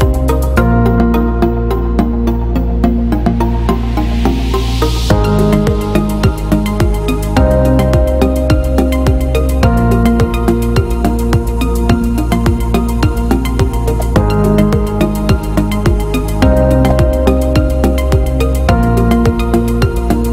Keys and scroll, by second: 8.4 b, 11.1 b, 11.8 b, 15.7 b.